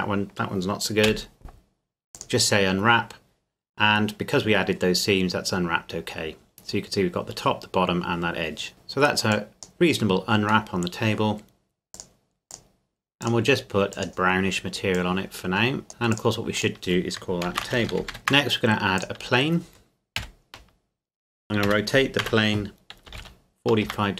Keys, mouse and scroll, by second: 1.0 u, 2.1 click, 5.1-5.8 scroll up 1, 8.7 Tab, 9.3 click, 10.7 middle click, 11.9 click, 17.4-18.2 typing, 19.0 click, 20.2 KP_7, 21.7 r, 22.2 z, 23.1 KP_4, 23.2 KP_5, 23.9 KP_Enter.